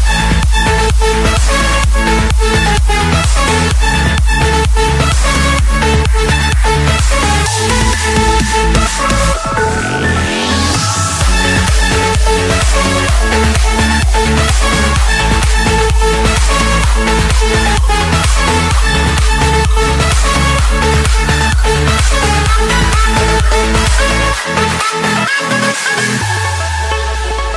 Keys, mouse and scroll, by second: 0.3 typing, 2.8-3.2 typing, 4.5 Return, 9.6 F8, 12.2 5, 13.3 9, 15.0 ., 18.0 3, 19.1 8, 20.9-22.1 typing, 23.9 Return, 26.1 Escape.